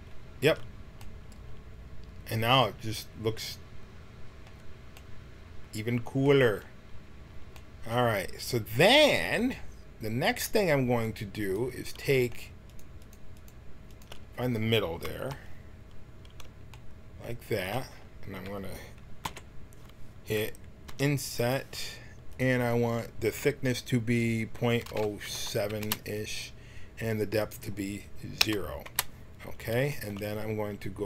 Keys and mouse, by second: 0.4 a, 1.1 middle click, 15.1 KP_1, 19.2 t, 20.9 i, 22.4-24.2 drag, 27.3-29.4 drag.